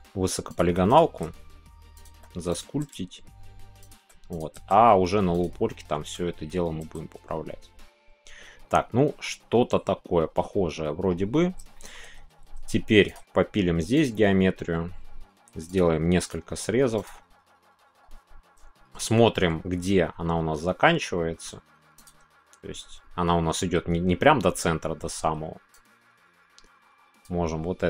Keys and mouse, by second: 0.4 click, 1.1 g, 2.9 g, 4.6 g, 5.7 middle click, 7.3-11.1 middle drag, 11.7 shift+middle click, 13.1 click, 14.0 click, 16.2 click, 18.9 shift+middle click, 25.7-27.8 drag.